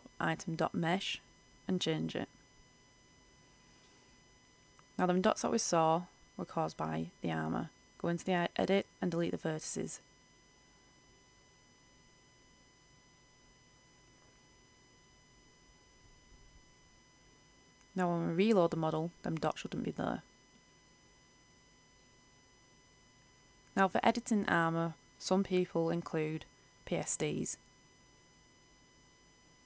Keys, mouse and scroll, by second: 0.7 click, 1.6-2.2 scroll up 1, 2.2 right click, 2.8 Tab, 3.7-4.4 scroll up 1, 4.4 middle click, 5.3 c, 5.7 click, 6.7 right click, 7.7 Delete, 8.3 i, 8.9-10.2 middle drag, 10.2-12.2 scroll down 1, 12.2 click, 14.2 Return, 18.1 Return, 18.4-29.6 drag.